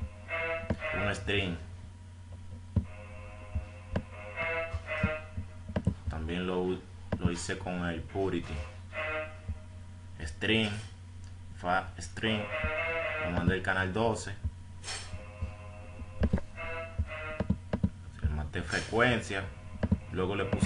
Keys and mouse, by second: 12.7 F1, 12.7 click, 13.1 F1, 15.5-17.0 drag.